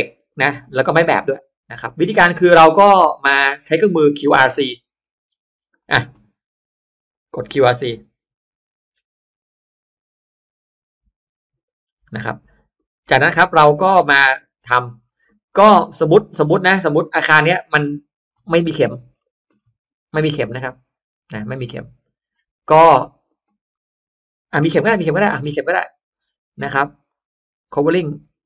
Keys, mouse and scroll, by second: 0.2 middle click, 0.9-1.2 scroll up 1, 3.1 click, 3.7 click, 4.5 click, 5.3 click, 5.7 drag, 7.0 click, 12.7 click, 13.3-14.8 scroll down 3, 13.9 middle click, 14.3 middle click, 14.9-15.3 scroll up 1, 15.4 middle click, 15.4 scroll down 1, 16.0 middle click, 16.9 middle click, 18.8-19.7 scroll up 1, 19.9 scroll up 1, 21.6 middle click, 22.1 scroll down 1, 23.6-25.2 middle drag, 23.6 scroll up 1, 26.9 click, 27.7 click.